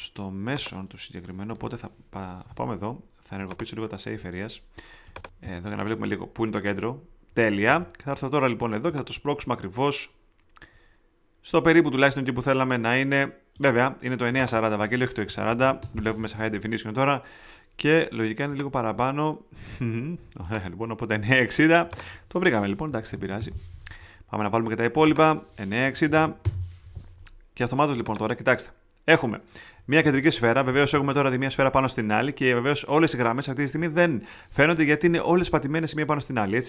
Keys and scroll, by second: 15.0-16.0 typing, 22.6-23.6 typing, 25.6-26.6 typing.